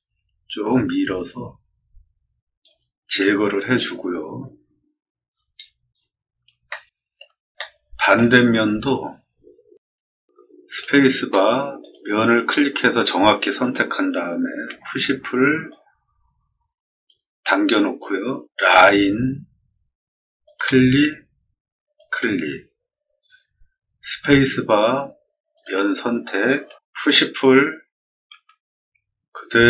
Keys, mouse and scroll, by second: 3.7 scroll down 2, 5.2 middle click, 5.2-6.0 scroll down 3, 5.5 middle click, 5.8 middle click, 6.6 shift+middle click, 7.5 middle click, 8.5-9.0 scroll up 3, 9.0 middle click, 9.6 middle click, 11.7 click, 14.6 p, 15.6-17.0 drag, 18.6 l, 20.3 click, 21.9 click, 24.1 space, 25.5 click, 26.9 p, 28.2 p, 29.3-29.6 drag.